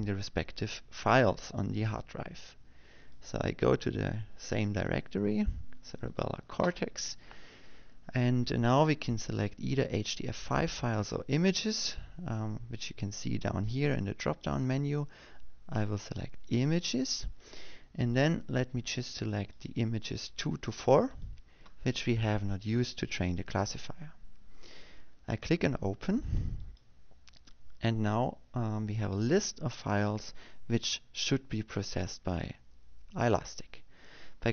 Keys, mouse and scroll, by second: 4.7 click, 6.3 click, 7.7 click, 16.0 click, 17.1 click, 21.1 click, 22.9 shift+click, 28.3 click.